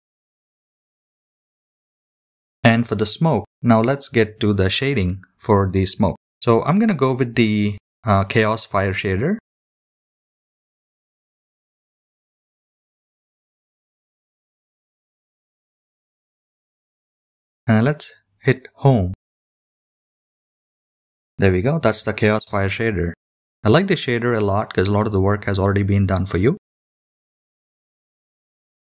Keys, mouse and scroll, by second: 1.6-8.4 drag, 11.7-22.0 drag, 22.0-28.9 middle drag, 22.0 scroll up 3.